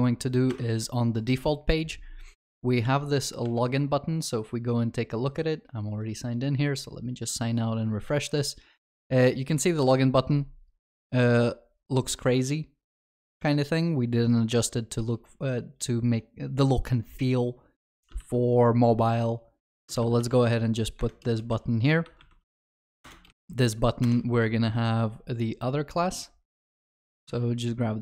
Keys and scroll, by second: 18.2 ctrl+c, 20.2 ctrl+v, 23.0 Return, 27.3 ctrl+c.